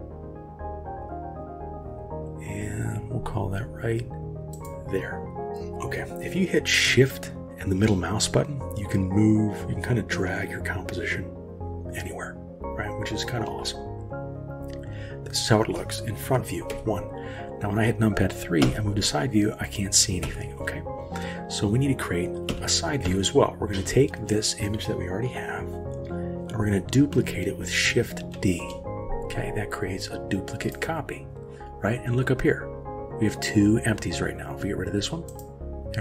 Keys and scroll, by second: 16.7 KP_1, 18.6 KP_3, 20.2 KP_1, 22.5 KP_3, 23.1 KP_1, 28.4 shift+d.